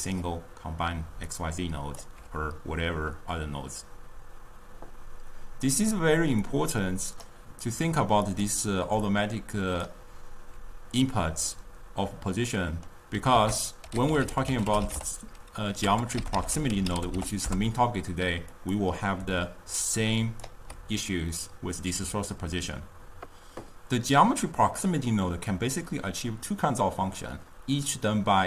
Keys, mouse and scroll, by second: 1.3 d, 1.4 click, 2.1 d, 2.4 d, 6.7 click, 8.5 click, 9.2 d, 9.3-9.9 drag, 9.9-10.6 d, 11.6-13.4 middle drag, 13.4 ctrl+a, 19.4 d, 20.0 click, 20.5-20.9 d.